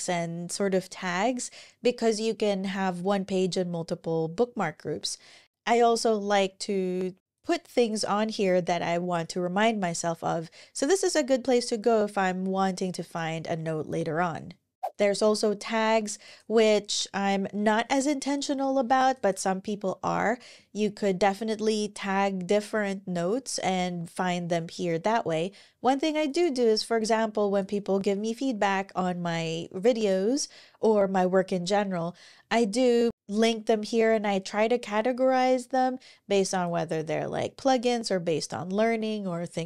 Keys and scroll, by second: 18.2 ctrl+super+l.